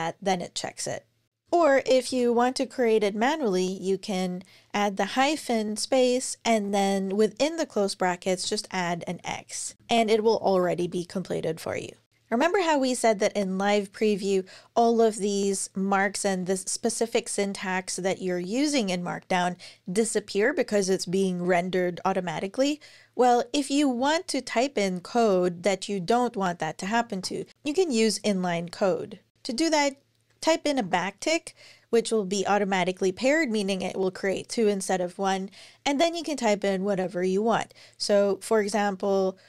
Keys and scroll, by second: 1.3 Return, 1.8 super+BackSpace, 5.0 typing, 6.3 [, 8.1 shift+x, 8.8 super+Right, 9.5-10.2 typing, 23.8 Down, 26.6 Return, 38.2 typing.